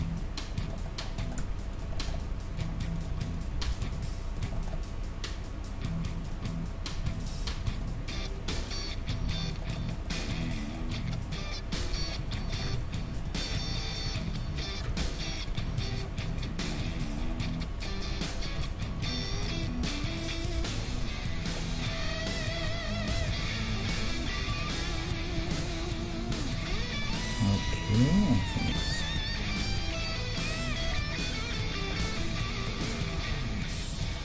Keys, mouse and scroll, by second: 0.0 g, 0.9-3.7 middle drag, 1.7 right click, 2.2 g, 3.7 right click, 4.6-6.6 middle drag, 4.7 g, 6.9-10.0 right drag, 7.5 g, 8.5 g, 9.8 click, 10.0 middle click, 10.4-12.2 drag, 10.4-12.2 right drag, 10.9 g, 11.8 g, 12.7 ctrl+Tab, 14.2 right click, 14.5 f, 14.9 ctrl+Tab, 15.7 g, 16.3 g, 18.6-21.3 right drag, 18.6 g, 19.8 g, 21.7-22.9 middle drag, 22.9-24.7 drag, 23.2 g, 26.0-28.3 drag, 28.1 KP_3, 28.3-30.8 middle drag, 29.2 e, 30.8 e, 32.1-33.9 middle drag, 33.2 g.